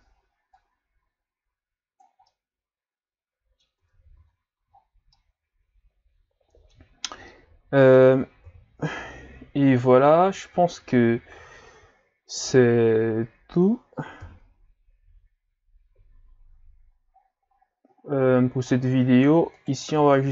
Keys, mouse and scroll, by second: 0.6-2.3 drag, 2.3-3.8 middle drag, 3.8 Tab, 4.2 a, 4.6 a, 4.7 scroll down 5, 5.1-5.4 scroll up 1, 5.4-8.5 middle drag, 8.5 KP_3, 11.2-12.9 scroll up 5, 12.9-14.2 scroll up 1, 14.2 KP_1, 16.8-17.2 scroll up 4, 17.2 scroll down 5, 17.5-17.9 scroll up 5, 17.9-19.0 scroll down 5, 19.1 scroll up 1, 19.6 right click, 19.9 Tab, 20.2 a.